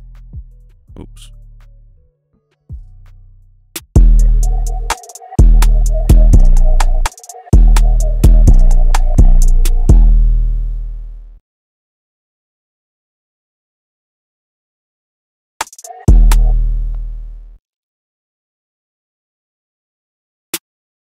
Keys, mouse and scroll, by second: 1.8 shift+click, 3.9 space, 6.8 space, 8.9-9.9 scroll up 1, 10.0 space, 13.4-13.8 scroll down 1, 13.8 right click, 16.5 space, 18.2 double click, 18.9-21.0 scroll up 1.